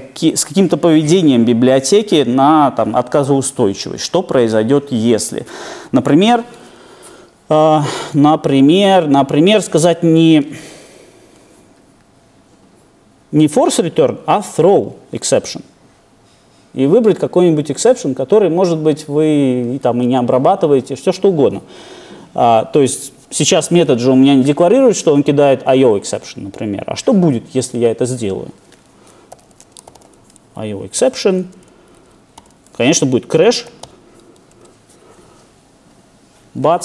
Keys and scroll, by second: 33.5 Return.